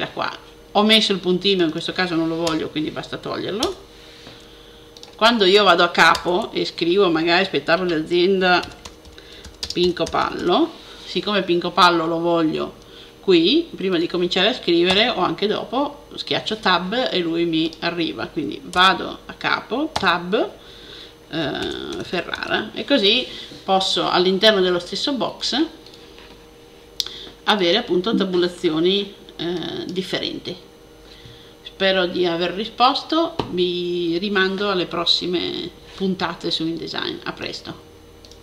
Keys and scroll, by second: 8.2-10.8 typing, 21.1-22.8 typing.